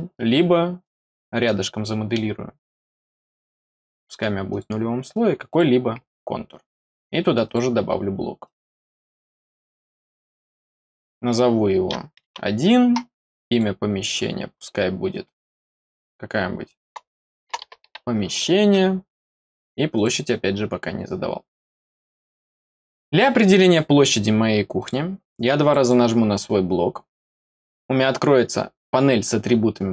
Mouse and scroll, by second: 0.7 click, 1.4 middle click, 3.2 click, 3.9 middle click, 4.4 click, 5.4 click, 7.4 click, 8.3 click, 9.7 click, 13.4 click, 19.9 click, 21.4 middle click, 22.8 scroll down 2, 23.4 scroll down 2, 23.7 middle click, 24.7 click, 25.5 click, 25.7 click.